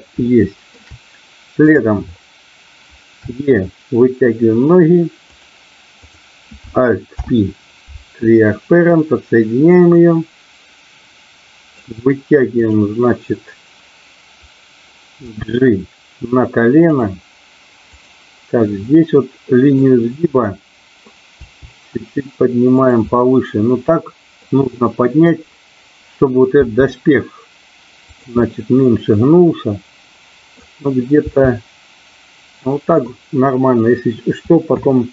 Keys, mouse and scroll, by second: 0.4 shift+middle click, 1.6 click, 3.2 e, 5.2 click, 6.0 click, 7.1 alt+p, 10.1-11.7 drag, 15.2 g, 16.9 click, 17.9 click, 18.9-19.9 middle drag, 20.5 middle click, 21.4 g, 22.7 click, 23.1-24.5 middle drag, 26.5 g, 28.4-30.5 middle drag, 31.2 g, 32.9 click, 34.6 KP_2.